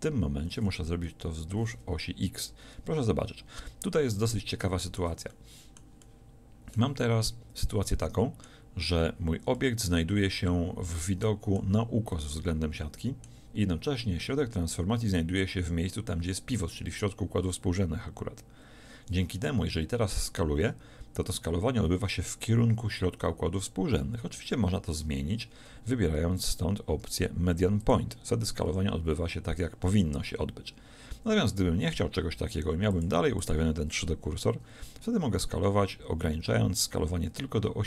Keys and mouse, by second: 4.3-5.5 middle drag, 5.5 click, 20.0 s, 28.7 s.